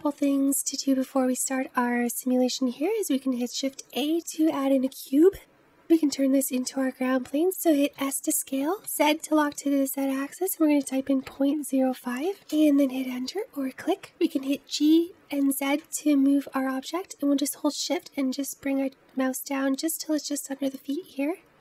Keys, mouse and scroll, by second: 0.5-2.5 scroll up 1, 2.5-3.3 scroll down 1, 3.3 shift+a, 7.9 s, 13.7-14.4 scroll up 1, 14.4 g.